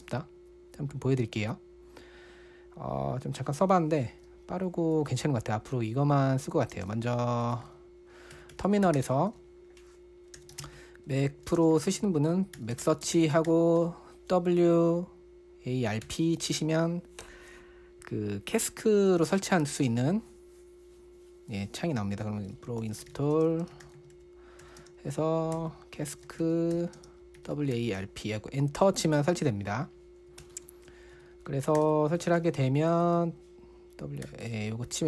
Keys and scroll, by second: 0.5-1.2 typing, 7.2 super+space, 7.6-14.7 typing, 16.5 typing, 23.0-28.9 typing, 30.8 super+BackSpace, 30.9 super+BackSpace, 31.3-34.7 typing, 32.7 super+space, 34.8 Return.